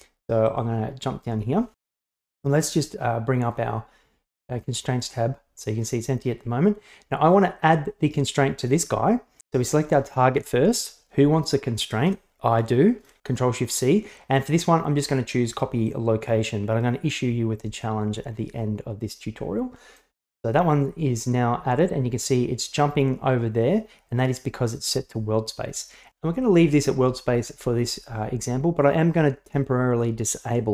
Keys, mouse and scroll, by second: 9.9 right click, 11.9 shift+click, 13.5 ctrl+shift+c, 30.5 click.